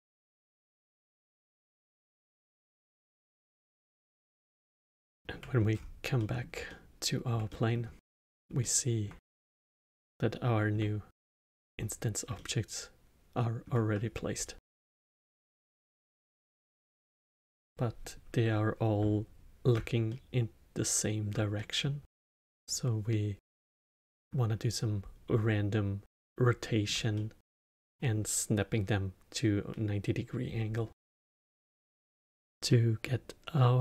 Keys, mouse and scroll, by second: 0.1 click, 1.0 KP_0, 1.3 click, 1.4 click, 2.2 KP_0, 2.8 shift+click, 3.7 drag, 4.3 click, 5.0 click, 5.2-5.7 alt+middle drag, 5.7-6.1 scroll up 6, 6.1-8.0 middle drag, 8.0-8.6 scroll up 3, 8.6-9.6 alt+middle drag, 9.6 scroll down 2, 10.0-11.6 alt+middle drag, 11.6 scroll up 1, 12.3-15.4 alt+middle drag, 20.0-22.1 alt+middle drag, 22.1-22.5 scroll down 1, 22.5-30.3 alt+middle drag, 32.6-33.8 middle drag.